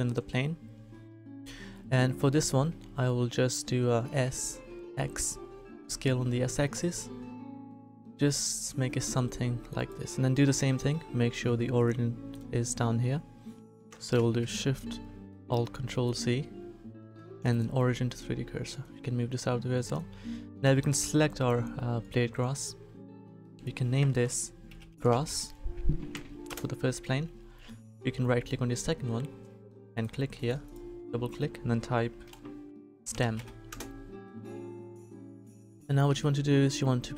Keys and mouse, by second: 4.1 s, 10.3-12.1 drag, 14.1 ctrl+alt+shift+c, 25.2 s, 29.9-32.5 middle drag, 36.1 a.